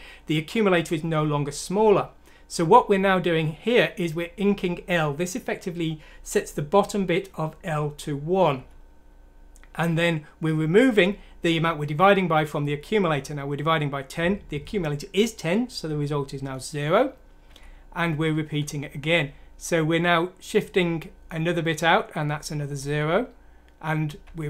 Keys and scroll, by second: 1.8 F7, 8.5 F7, 15.8 F7, 18.4 F7, 21.7 F7, 22.2 F7, 24.2 F7.